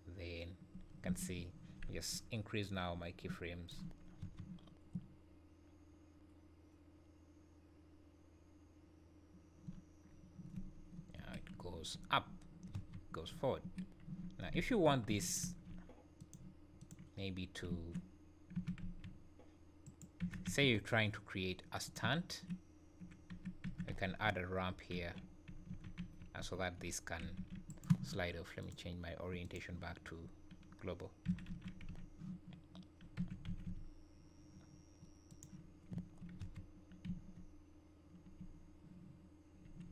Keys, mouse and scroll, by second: 1.1 Escape, 2.6 click, 4.2 space, 9.7-10.1 scroll up 4, 10.1-11.2 scroll down 1, 11.2 Escape, 11.2 scroll down 2, 11.6 `, 12.3 `, 12.7 space, 13.6 Escape, 14.6 `, 15.2 shift+right click, 15.4 shift+a, 17.7 `, 18.6 r, 20.2 r, 22.0 `, 23.6 r, 28.6 click, 31.3 f, 31.5 y, 31.9 x, 33.2 r, 35.9 `, 36.4 space, 37.0 `, 38.4 `.